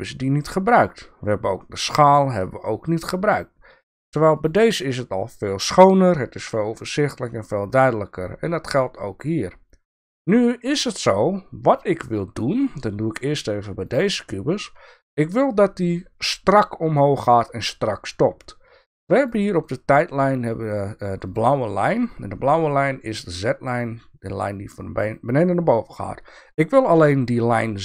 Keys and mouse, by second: 4.3 click, 7.7 click, 13.8 click, 19.2 click, 21.3 click.